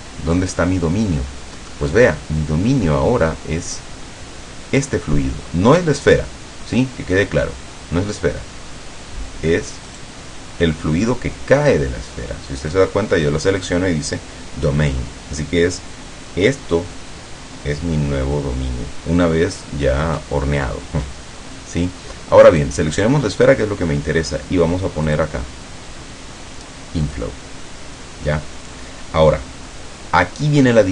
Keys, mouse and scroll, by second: 6.1 right click, 10.0 right click, 22.6 right click, 25.2 click, 27.1 click.